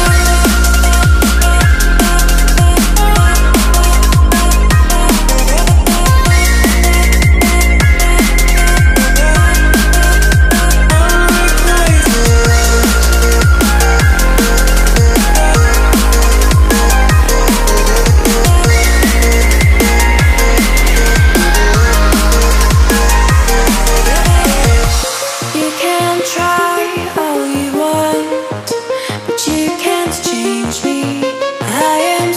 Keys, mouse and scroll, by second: 3.7 scroll up 1, 4.1 click, 5.1 alt+Tab, 5.7 ctrl+c, 5.9 Tab, 6.3 v, 6.5 alt+scroll down 1, 7.0 click, 9.5 Left, 10.9 t, 12.7 Return, 12.8 click, 13.3 t, 13.5 click, 14.5 Return, 15.1 Down, 15.8 click, 18.5 alt+Tab, 19.4 alt+click, 19.7 e, 20.1 click, 20.4 scroll down 1, 21.6 click, 23.9 Return, 25.1 click, 25.2 Delete, 25.6 click, 26.5 o, 26.9 click, 27.7 u, 28.0 click.